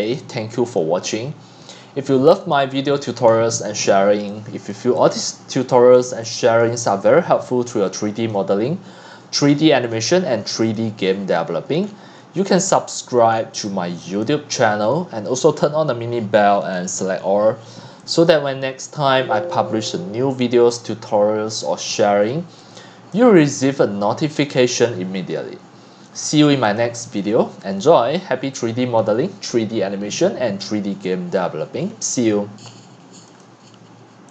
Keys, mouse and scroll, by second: 0.0 click, 3.3-3.7 scroll up 9, 3.9 click, 4.2 x, 4.7 c, 4.7-6.2 drag, 6.2 x, 6.6 c, 8.3 click, 8.6 middle click, 9.0 click, 9.2 x, 9.5 c, 9.9-10.7 drag, 10.7-11.8 right drag, 11.8 click, 12.1 click, 12.7 c, 13.2 right click, 13.3 scroll down 7, 13.6 x, 14.2-16.7 right drag, 16.7 click, 18.3 click, 20.4 click, 21.1 click, 22.5 drag, 23.2 x, 23.8 x, 24.1 c, 24.5 click, 26.8-34.3 drag.